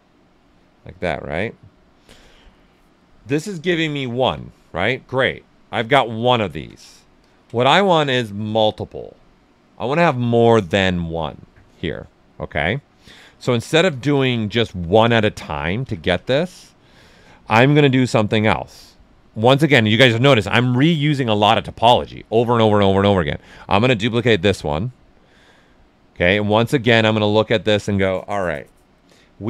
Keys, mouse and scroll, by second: 0.6 ctrl+right click, 1.4-5.5 right drag, 5.5 q, 5.7 shift+f, 7.2 ctrl+click, 13.1 ctrl+z, 17.1 alt+right click, 18.0-24.1 drag, 26.6 shift+f, 27.2 alt+right click, 29.2 right click.